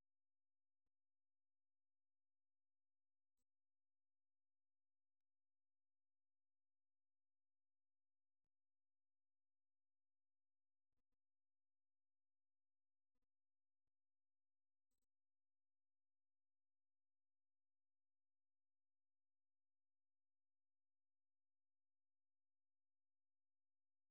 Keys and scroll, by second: 0.0-2.1 typing, 1.3 Return, 2.4 ctrl+[, 4.3 o, 5.4 ctrl+', 5.8 ctrl+[, 6.5 super+2, 23.0-24.1 typing.